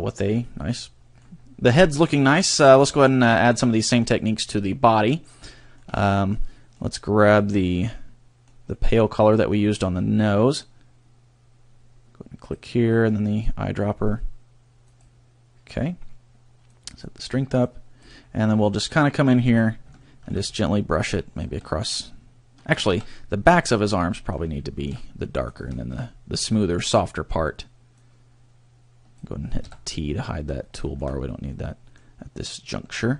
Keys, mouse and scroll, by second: 1.7 middle click, 2.9 middle click, 3.3 middle click, 4.0 middle click, 5.6 shift+middle click, 6.2 scroll down 1, 6.4 middle click, 6.9 middle click, 7.5 middle click, 8.8 middle click, 9.2 middle click, 12.4 click, 16.6 click, 17.6 click, 18.5-18.8 scroll up 2, 20.0 shift+middle click, 20.4 scroll up 1, 21.0 click, 21.8 shift+middle click, 23.0 ctrl+z, 23.3 scroll down 1, 23.6 middle click, 24.5 middle click, 25.0 middle click, 25.7 shift+middle click, 26.0-26.4 scroll up 2, 26.4 middle click, 27.9 click, 28.2 scroll up 1, 29.6 t, 30.6 shift+middle click, 31.1-31.4 scroll up 2, 31.4 middle click, 33.0 scroll up 1.